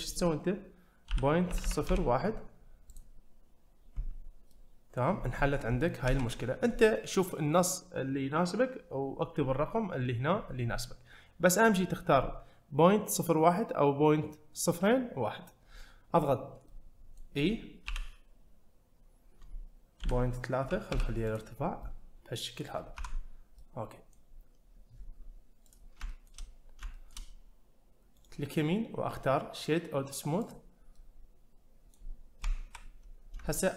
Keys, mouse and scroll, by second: 4.5 middle click, 6.1 `, 16.7 middle click, 17.9 e, 21.6 scroll down 1, 21.8-22.8 middle drag, 23.0 Tab, 23.3 scroll down 1, 23.6-24.1 middle drag, 24.3-25.7 scroll up 1, 25.7 click, 26.1-26.9 shift+scroll up 3, 26.1 shift+middle click, 26.9 shift+middle click, 28.2-30.9 right drag, 30.9-31.9 middle drag, 33.2 scroll down 1, 33.5 shift+middle click.